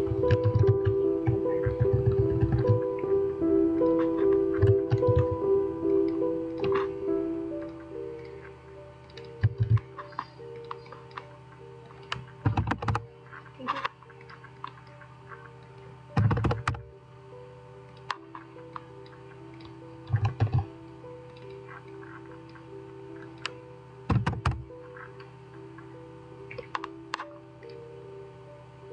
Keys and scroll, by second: 0.3 ctrl+a, 9.5 ctrl+a, 12.4-13.3 typing, 12.9 Return, 16.0-16.8 typing, 20.3 typing, 24.2 typing.